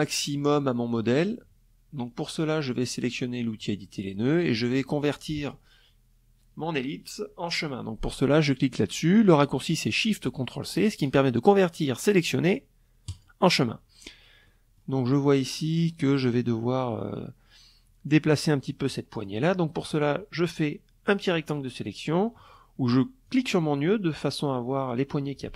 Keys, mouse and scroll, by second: 2.1 click, 11.6 click, 13.0 middle click, 14.0 click, 17.7 click, 18.6-19.8 drag, 21.1 click, 21.8 click, 25.4-25.5 drag.